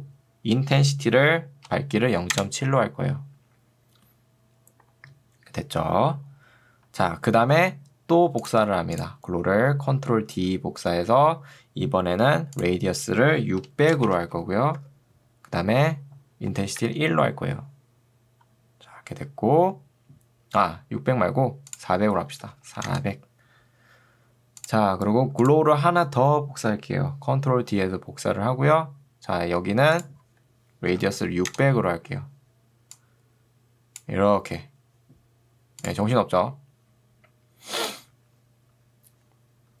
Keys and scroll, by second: 2.4 Return, 10.4 ctrl+d, 14.0 6, 14.8 Tab, 16.6 1, 16.8 Return, 22.6 0, 22.8 Return, 27.8 ctrl+d, 31.0 0, 31.6 Return.